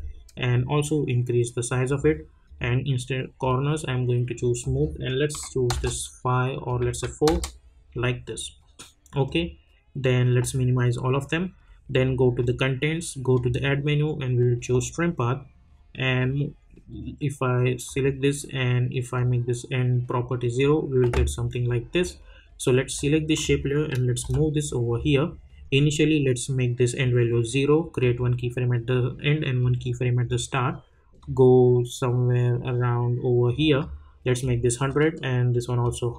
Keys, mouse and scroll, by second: 0.5-2.4 drag, 5.7 Return, 6.7 click, 7.2 Return, 9.2-22.9 drag, 24.2 [, 25.6-28.0 drag, 30.1 scroll down 1, 31.2-36.1 drag.